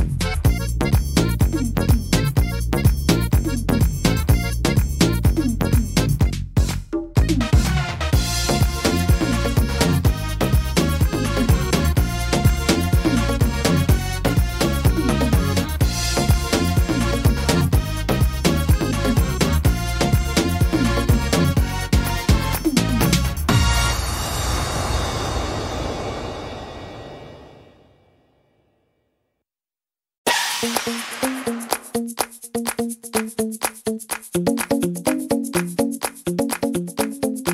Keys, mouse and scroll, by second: 0.7 shift+middle click, 1.1 scroll up 1, 1.5 middle click, 2.3 scroll down 2, 2.6 middle click, 4.2-4.8 scroll up 5, 4.6 middle click, 7.5 click, 8.0 right click, 8.8 click, 10.6 middle click, 14.8 scroll down 1, 16.0 scroll down 4, 17.0 click, 22.1 middle click, 22.9-23.2 scroll down 2, 23.2 shift+middle click, 24.1 click, 25.1-25.6 scroll up 7, 25.8 middle click, 27.1 scroll down 2, 27.5 middle click, 28.5 scroll down 1, 29.0 shift+middle click, 29.3 scroll up 2, 29.6 middle click, 29.9 scroll down 2, 30.3 middle click, 31.9 shift+middle click, 32.6 middle click, 32.9-35.3 scroll up 6, 35.7 click.